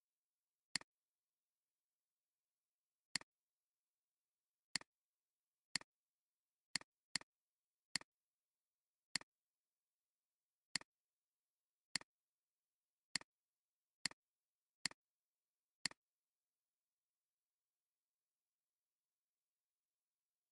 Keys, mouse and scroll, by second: 7.1 space, 7.2 double click, 9.1 alt+shift+click, 15.4 alt+scroll down 1, 15.8 space, 19.7 alt+scroll up 1.